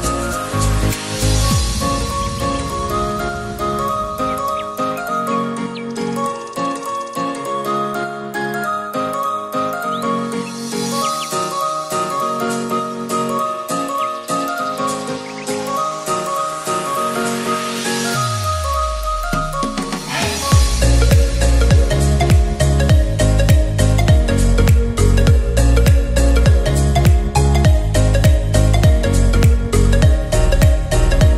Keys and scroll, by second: 16.9 ctrl+d, 20.7 Right, 22.7 Left.